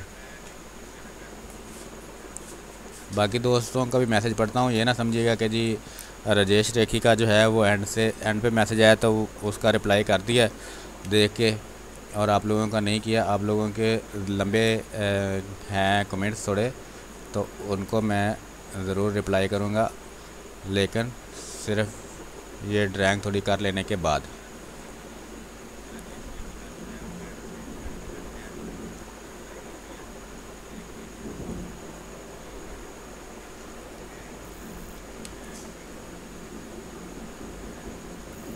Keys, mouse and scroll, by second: 0.5 space, 0.9 click, 1.0 space, 1.4 click, 1.4 space, 2.5 click, 3.2 space, 3.5 alt+click, 5.0 click, 5.8-7.2 drag, 7.2 r, 7.5-9.0 drag, 9.0 b, 9.5 ctrl+space, 9.8 ctrl+click, 10.0 ctrl+space, 10.6 b, 11.0 space, 11.3 ctrl+click, 11.8-15.9 drag, 13.2 click, 15.9-17.3 drag, 17.3 space, 17.5 click, 17.8 space, 17.9 space, 18.3-19.9 drag, 19.9 space, 21.9-25.9 drag, 25.9 space, 26.0 click, 26.4 space, 26.7-29.9 drag, 29.9-31.2 drag, 31.2 space, 31.4 click, 31.7 space, 33.4 click, 34.0 r, 34.2 click, 34.9 b, 35.2 space, 35.3 click, 35.7 space, 36.5-38.5 drag.